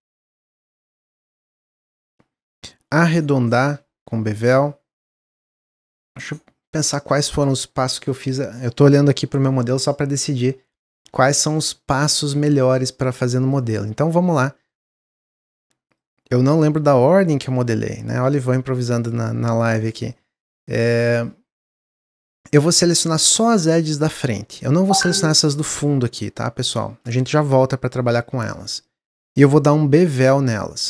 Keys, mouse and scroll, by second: 1.4 alt+click, 2.4 click, 3.2 2, 3.5 click, 4.4 shift+click, 6.2-7.2 middle drag, 7.2 click, 9.5-12.6 middle drag, 13.4 click, 14.6-15.8 middle drag, 15.8 shift+click, 16.4 shift+click, 16.9-18.2 middle drag, 18.2 shift+click, 18.9 shift+click, 19.9 shift+click, 20.5 shift+click, 21.7 shift+click, 22.2-25.3 middle drag, 28.4-30.1 middle drag, 30.1 ctrl+b.